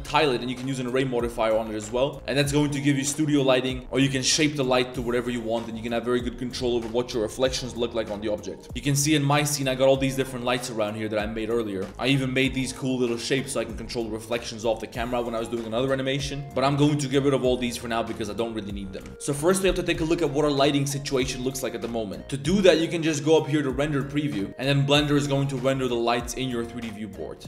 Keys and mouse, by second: 0.8 click, 1.0 e, 1.6 Tab, 1.9 click, 2.4 Tab, 2.5-3.0 drag, 3.2 click, 3.5 click, 3.8 Tab, 4.2 click, 5.5 click, 8.9-9.5 middle drag, 10.0-11.8 middle drag, 11.9 click, 12.0 Tab, 12.1 middle click, 12.6 Tab, 13.7 shift+click, 14.2 drag, 16.8 z, 18.2 click, 18.9 KP_Decimal, 24.1 click.